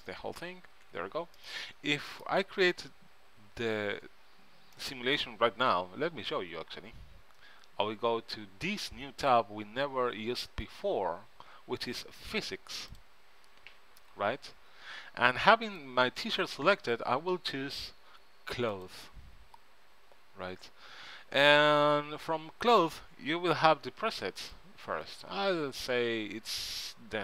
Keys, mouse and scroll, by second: 1.0 Tab, 4.9 middle click, 6.5 middle click, 13.1-14.7 right drag, 15.8-17.6 right drag, 18.9 right click, 19.0-20.7 drag, 21.6-23.6 drag, 24.5-26.4 drag.